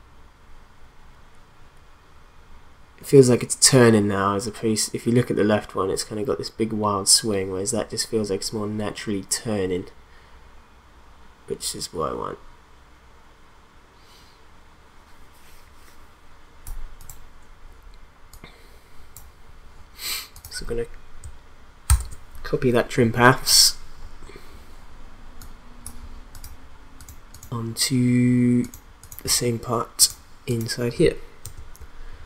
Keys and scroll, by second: 21.9 ctrl+c, 31.4 ctrl+v.